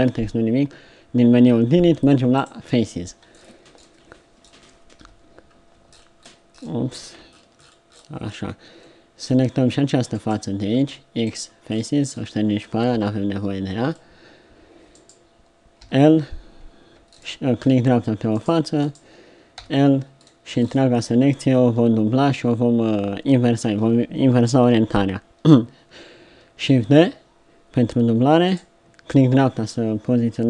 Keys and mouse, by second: 5.0 KP_7, 5.2-6.3 middle drag, 10.7 x, 12.0 middle click, 12.9 KP_7, 13.9 click, 14.1 middle click, 15.8 l, 19.6 l, 19.8 click, 20.6-22.8 right drag, 26.7 shift+d.